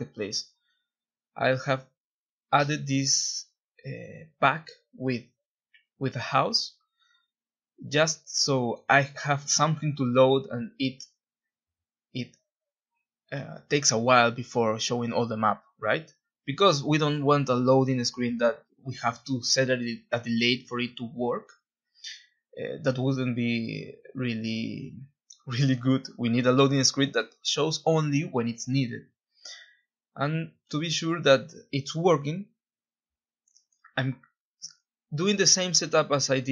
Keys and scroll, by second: 3.6 ctrl+shift+Escape, 16.4-21.2 typing, 18.5 Escape, 28.7-36.3 typing, 31.9 Escape.